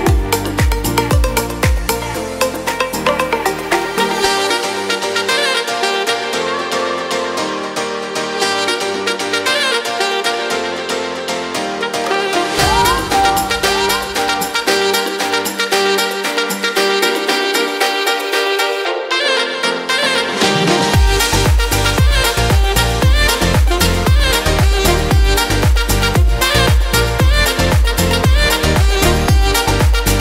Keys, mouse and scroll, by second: 10.7 middle click, 11.2 F4, 17.7 Delete, 22.8 w, 25.6 ctrl+z, 29.5 click.